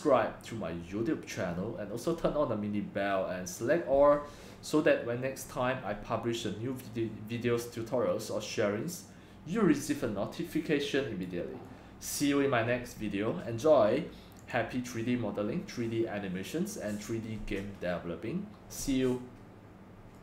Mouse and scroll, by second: 1.5 scroll up 1, 1.5-4.3 scroll down 3, 4.3-5.4 scroll down 1, 5.4-6.0 scroll, 7.3-9.7 scroll down 7, 9.7-10.9 scroll down 1, 10.9 scroll down 1, 11.3-14.5 drag, 18.2-20.2 drag.